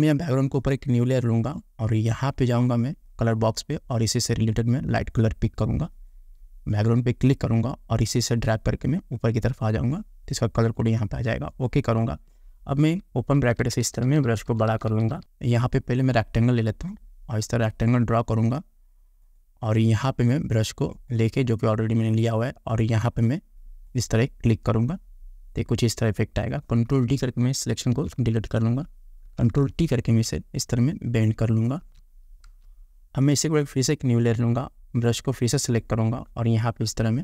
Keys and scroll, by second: 28.2 ctrl+d, 29.6 ctrl+t, 32.7 Return.